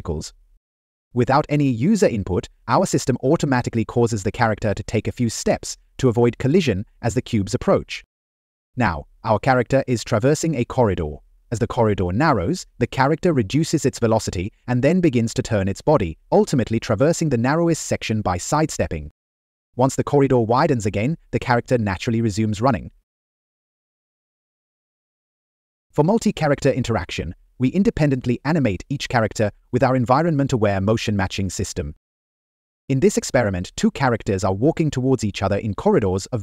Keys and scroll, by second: 5.8 Down, 7.6 Right, 11.0 Right, 24.1 Up, 25.0 Right, 25.1 Up, 26.2 Left, 28.0 Up, 30.0 Up, 32.7 Left.